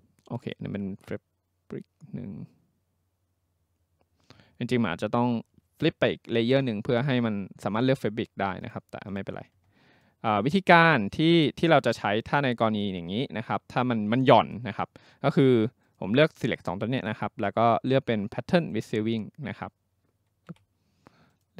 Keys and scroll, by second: 20.5 Escape.